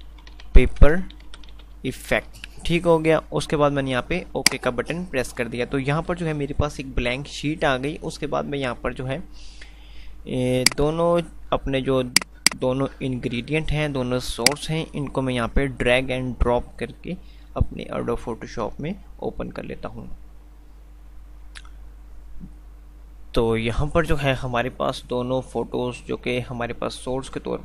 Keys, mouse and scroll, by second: 7.3 F5, 10.9-13.9 drag.